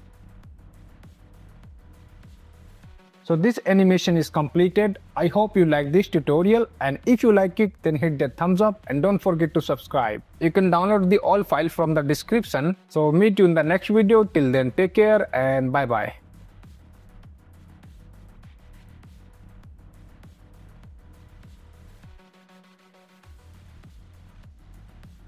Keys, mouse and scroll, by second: 0.0 space, 1.2 space, 1.4 click, 2.9 ctrl+s, 3.1 space, 3.3 ctrl+a, 3.6 click, 5.2 click, 7.2 space.